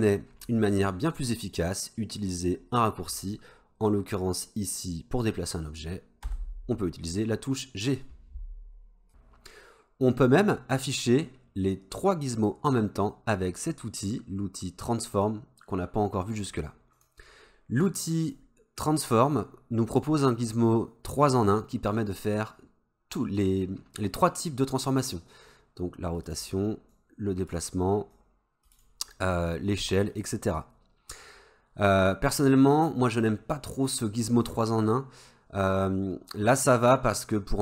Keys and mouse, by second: 6.3 g, 17.0 click, 18.3 click, 25.5 click, 27.0-27.6 drag, 28.2 click, 29.6 click.